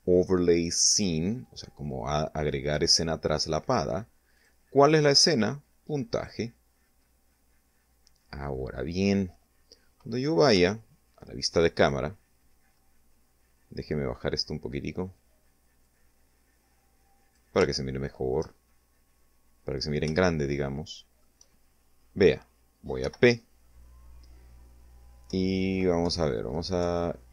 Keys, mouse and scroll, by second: 3.2 click, 5.0 click, 6.3-6.9 scroll down 2, 7.3-7.9 scroll down 2, 9.4 0, 10.7-11.1 scroll up 2, 11.9 scroll down 2, 14.7-16.4 drag, 16.6 shift+middle click, 17.5 shift+scroll up 2, 18.1 scroll up 2, 19.2-20.2 shift+middle drag, 21.9 p, 24.1 Left, 26.4 Up.